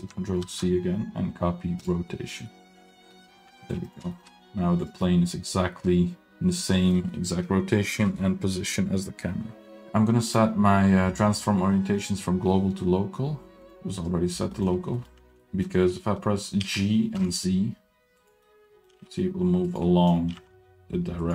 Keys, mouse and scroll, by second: 0.4 ctrl+c, 2.5-3.7 middle drag, 3.8 click, 4.1 shift+middle drag, 4.6 scroll down 1, 4.8 drag, 5.0-6.3 middle drag, 6.7 middle drag, 7.1 middle drag, 9.8 middle click, 10.2-14.4 drag, 14.5 middle click, 14.7 scroll up 1, 14.9 middle click, 15.3 scroll down 1, 15.4 middle click, 15.9-16.4 scroll up 1, 16.6 g, 18.3 scroll down 1, 18.4-18.8 middle drag, 18.9 g, 19.8 middle drag, 20.3 g.